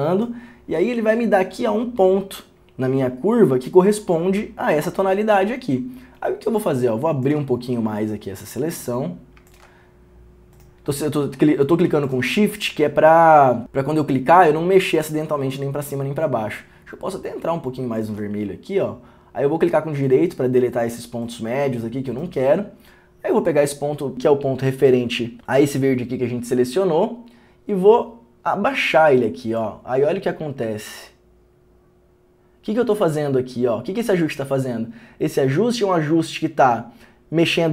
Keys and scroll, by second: 7.1 Return.